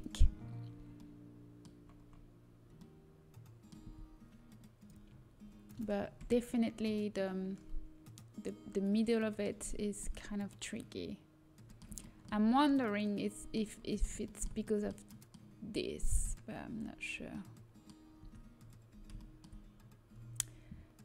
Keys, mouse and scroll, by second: 1.8-3.5 middle drag, 8.6 middle click, 9.9-13.7 middle drag, 18.8 Tab.